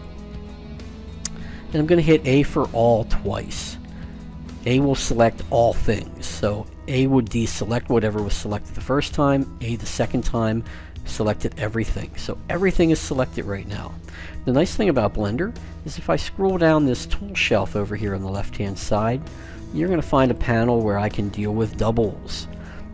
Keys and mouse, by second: 0.0 click, 0.3 middle click, 2.6 a, 3.3 a, 15.7-17.3 drag, 17.8-19.3 drag.